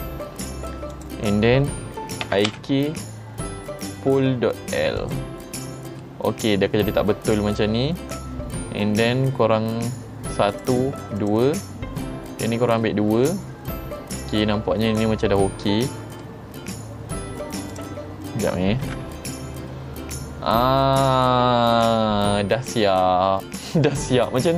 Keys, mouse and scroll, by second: 1.0 click, 5.1 click, 6.1 middle click, 10.6 click, 11.3 click, 12.9-16.3 middle drag, 17.8 click, 18.9 g.